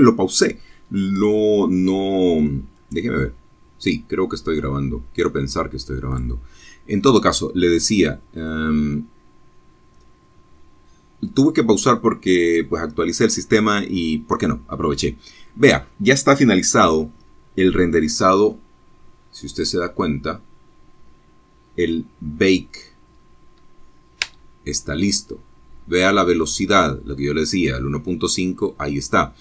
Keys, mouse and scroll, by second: 0.2 click, 3.6 click, 4.8 scroll down 2, 17.3-17.6 scroll up 2, 18.0-18.4 scroll down 2, 21.7 space, 27.6 space.